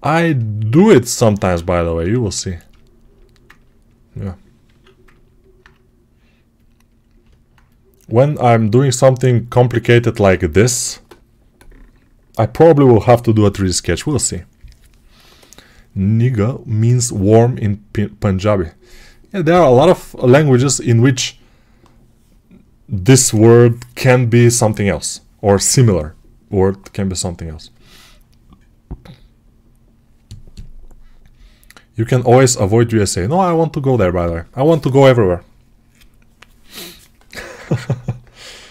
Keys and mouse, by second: 1.0 alt+q, 4.5 alt+q, 7.1-38.7 alt+drag.